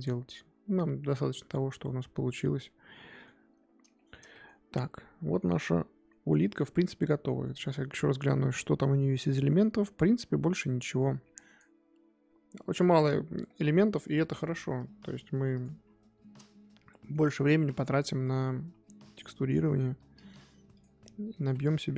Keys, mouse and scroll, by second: 2.6-11.0 middle drag, 15.5 click, 15.7 KP_3, 16.9 shift+middle drag, 17.1-17.4 scroll up 2, 17.4 Tab, 18.2 click, 20.7 click.